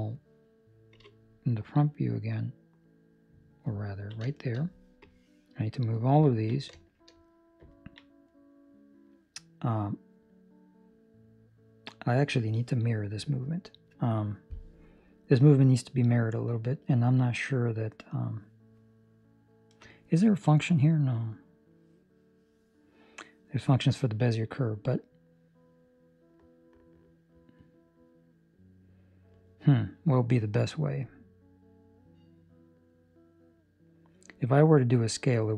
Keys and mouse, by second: 0.9 KP_1, 2.0 middle click, 3.7 ctrl+middle click, 4.2 shift+middle click, 4.9 click, 6.2 ctrl+middle click, 6.7 shift+middle click, 7.7 ctrl+middle click, 8.2 middle click, 15.2 middle click, 19.5 middle click, 21.1 middle click, 21.1 click, 24.2 middle click, 30.0 middle click.